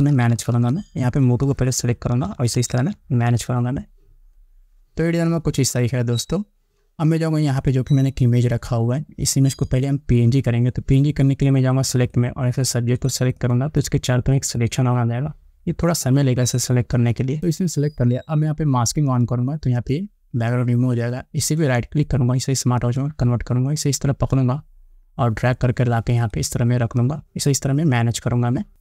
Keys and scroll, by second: 0.1 Down.